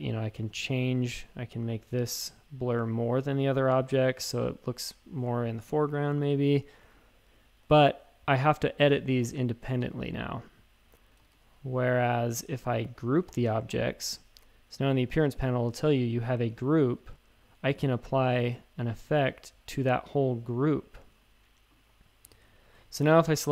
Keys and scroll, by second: 3.9 shift+super+a, 4.3-4.9 typing, 11.2 super+z, 11.3 super+z, 13.3 super+g, 22.3 shift+super+a.